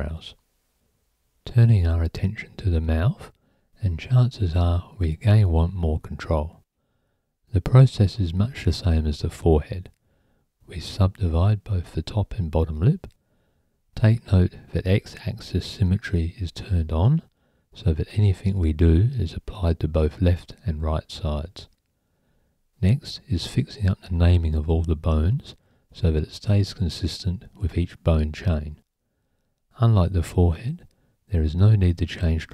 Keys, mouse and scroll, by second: 0.4 click, 0.7-1.2 right drag, 1.8 click, 2.0 right click, 2.9 click, 5.6 click, 6.3 F2, 7.9 click, 8.3 F2, 9.8 F2, 10.1 BackSpace, 12.2 click, 12.8 click, 14.7 F2, 15.6 click, 16.1 F2, 17.5 click, 17.9 F2, 18.4 BackSpace, 19.1 click, 19.6 click, 20.3 F2, 21.4 click, 21.9 F2, 23.4 BackSpace, 24.1 click, 24.6 F2, 26.1 F2, 27.0 click, 27.6 BackSpace, 28.8 click, 30.0 click, 30.9 click.